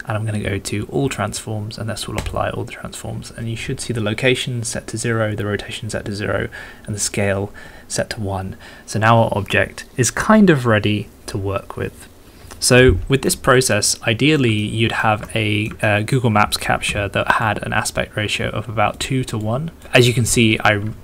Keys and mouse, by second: 12.8 middle click, 13.8 middle click, 14.6 shift+middle click, 15.3 middle click, 15.9 shift+middle click, 16.8-19.8 d, 19.4 middle click.